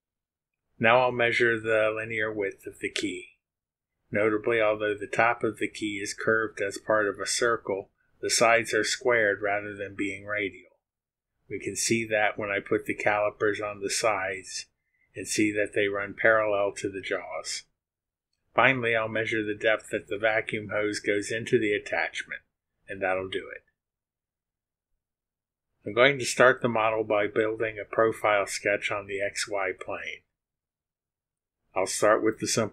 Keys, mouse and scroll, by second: 25.1 click, 28.6 click.